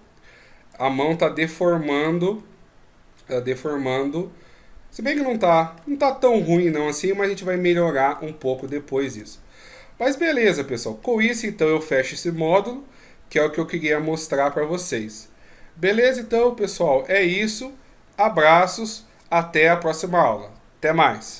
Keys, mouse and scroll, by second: 0.7 click, 2.4 middle click, 6.2-6.5 ctrl+scroll up 2, 7.7 ctrl+z, 8.1 middle click, 8.9-9.2 shift+scroll up 1, 9.2-10.6 scroll down 11, 10.6-11.0 scroll down 2, 11.0 middle click, 12.3 KP_1, 13.9 ctrl+scroll down 1, 15.9 click.